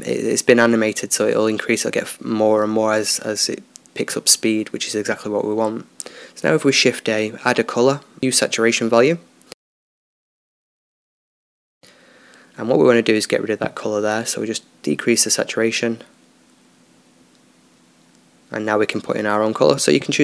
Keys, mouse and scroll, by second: 14.2-20.2 drag.